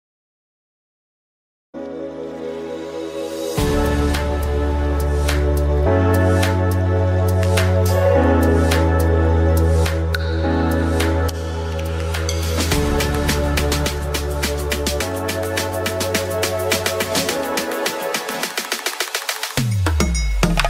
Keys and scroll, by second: 10.4 5, 18.7 ctrl+s.